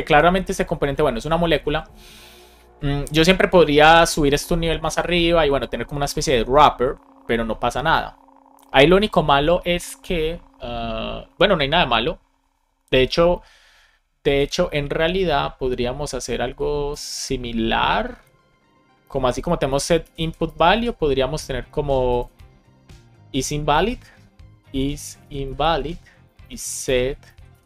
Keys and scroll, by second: 19.6 shift+super+Left, 19.9 super+c, 20.1 Right, 20.4 Return, 20.7 super+v, 25.0 shift+i, 25.6 Return, 26.2 Right, 26.8 alt+shift+Right.